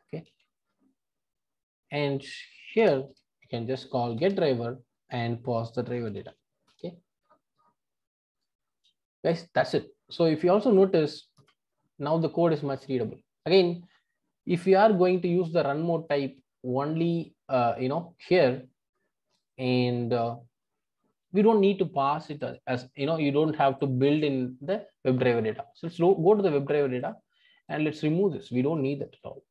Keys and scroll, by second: 0.3 super+v, 4.3 Return, 6.7 Return, 25.9 super+b.